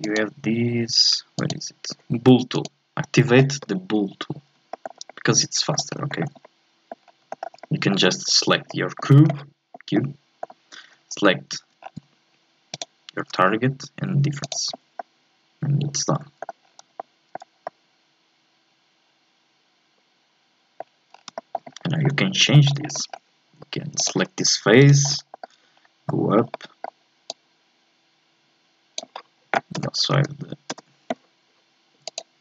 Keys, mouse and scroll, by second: 0.0-4.7 drag, 4.7-5.9 shift+middle drag, 5.9 scroll up 1, 6.1 shift+middle click, 7.0-7.3 scroll down 2, 7.3 shift+middle click, 8.0-8.7 scroll up 1, 8.7-10.6 middle drag, 10.6-11.8 scroll up 1, 11.8 scroll down 3, 12.1-12.7 scroll up 1, 12.7-14.4 shift+right drag, 14.4 click, 15.0-16.6 middle drag, 16.6-17.0 scroll down 4, 17.0-20.7 shift+middle drag, 20.8-21.8 scroll up 7, 21.3 shift+middle click, 21.8 middle click, 22.1 Tab, 22.5 shift+middle click, 22.8 scroll up 2, 22.9-24.0 middle drag, 24.0 click, 24.8 right click, 25.1 scroll down 4, 25.3 shift+middle click, 25.4-25.8 shift+scroll up 3, 26.1-27.3 middle drag, 27.3-29.7 drag, 29.7 n, 30.7 n, 32.1-32.4 drag.